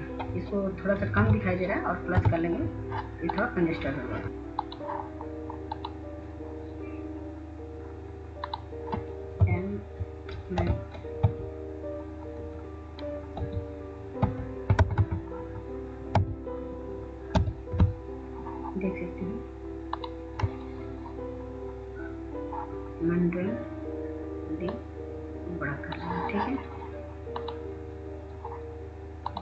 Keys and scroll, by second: 2.3 ctrl+z, 10.6 m, 11.8 ctrl+a, 13.4-14.1 typing, 15.4-18.6 typing.